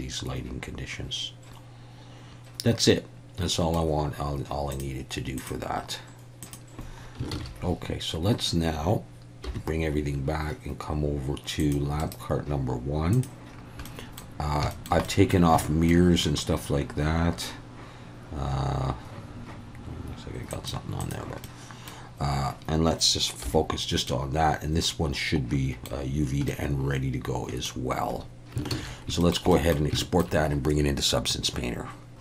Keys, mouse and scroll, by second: 4.7 click, 5.4 click, 6.4 click, 7.3 ctrl+s, 9.5 /, 11.6 click, 12.0-13.3 right drag, 13.9 middle click, 14.7 shift+middle click, 15.1 middle click, 15.6 shift+middle click, 20.6 click, 21.0 click, 21.5 middle click, 23.4 /, 24.1-25.8 middle drag, 26.5-27.7 middle drag, 28.7 ctrl+s, 29.2 shift+middle click, 29.5 middle click, 30.0 shift+middle click.